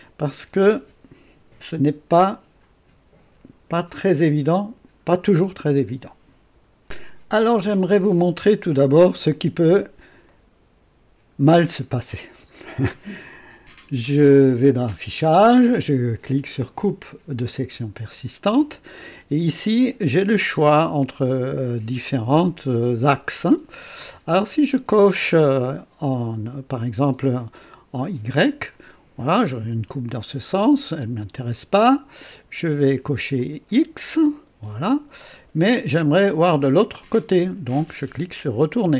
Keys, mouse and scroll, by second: 10.2-11.0 right drag, 11.3 scroll up 1, 11.9 scroll down 1, 12.3 right click, 14.8 click, 17.6 click, 28.2 click, 31.8 click, 33.3 click, 38.3 click.